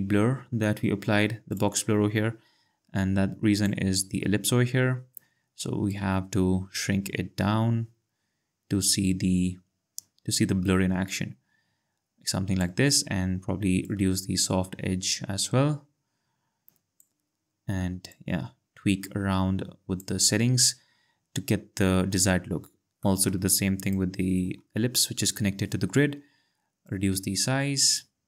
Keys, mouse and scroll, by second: 1.5 click, 5.9 click, 13.8 click, 18.1 click, 23.0 click, 23.8 click, 26.8 click.